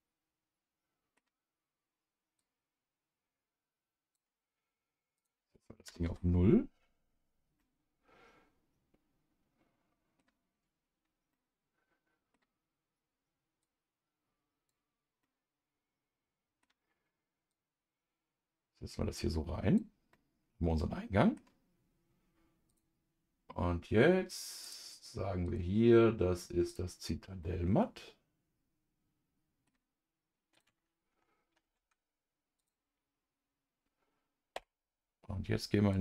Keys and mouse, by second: 2.4-7.3 drag, 7.6-10.2 middle drag, 11.3-12.3 middle drag, 13.6-15.2 drag, 15.2-16.6 middle drag, 17.5-19.8 drag, 20.1-21.4 middle drag, 22.7 click, 24.6-27.3 drag, 27.4-29.7 middle drag, 30.5 click, 31.6 ctrl+s, 32.6-34.5 drag, 34.5 KP_Divide.